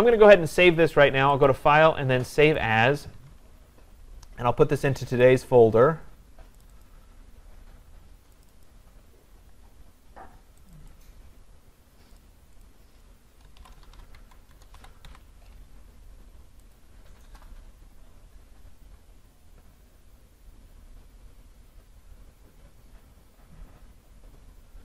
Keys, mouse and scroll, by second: 1.5 click, 2.6 click, 5.3 click, 6.6 click, 6.9 click, 8.5 click, 8.7 click, 9.5 middle click, 9.7 middle click, 10.7 click, 10.9 click, 11.8 scroll, 12.2 click, 12.6 click, 13.0-13.6 scroll down 2, 13.9-15.6 typing, 16.8 click, 19.5-21.9 drag.